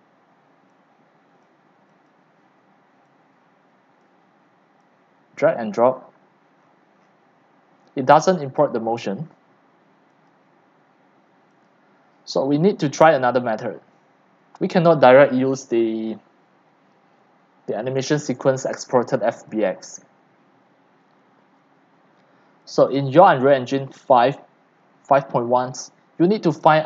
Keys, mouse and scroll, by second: 0.0 click, 0.8-1.5 drag, 2.1 click, 4.0-6.6 drag, 6.7-8.6 scroll down 12, 8.6 right click, 11.2-19.2 drag, 19.5-22.7 drag, 25.7 click, 26.6-26.8 drag.